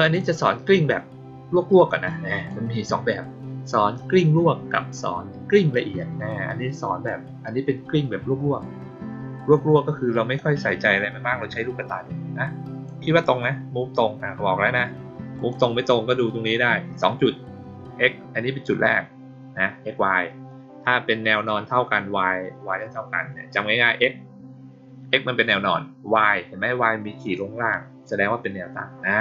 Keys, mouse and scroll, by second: 2.0-2.4 drag, 7.0-7.4 drag, 10.3-12.8 drag, 15.3 click.